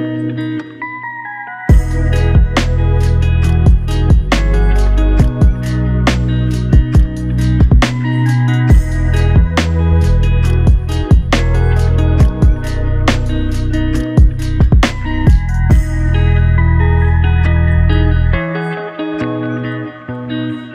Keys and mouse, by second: 2.1 double click, 2.8 shift+click, 3.1 shift+double click, 4.6 alt+click.